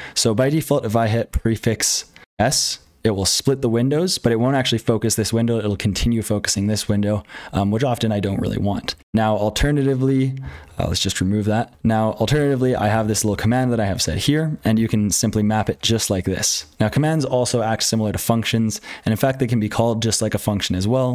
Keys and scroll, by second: 0.0-21.1 typing, 9.0 ctrl+d, 10.3 ctrl+z, 16.4 ctrl+[.